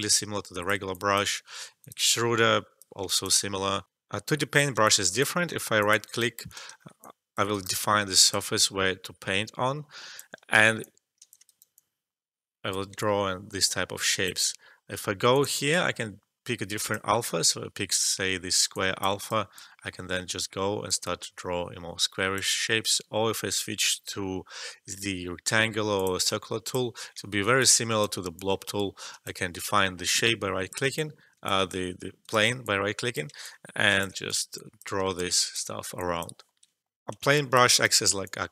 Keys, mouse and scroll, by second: 3.8 alt+F12, 4.8 alt+click, 5.6 alt+middle click, 6.0 alt+click, 6.0 right click, 6.7 alt+middle click, 7.0 alt+click, 7.5 right click, 8.1-10.4 alt+drag, 10.4 alt+middle click, 10.7 alt+click, 11.4 shift+right click, 11.7-15.3 drag, 18.7 alt+click, 19.1 alt+shift+right click, 19.5-22.7 drag, 22.7 e, 25.9 click, 27.2 alt+middle click, 27.8 click, 28.3 alt+click, 29.5 shift+right click, 30.2 click, 30.9 alt+click, 32.2 right click, 32.6 click, 33.4 alt+click, 34.2 right click, 34.5 click, 35.1 alt+click, 35.7 alt+middle click, 36.0 alt+click, 36.8 alt+F12, 37.3 alt+click, 37.7 right click, 38.2-38.5 drag.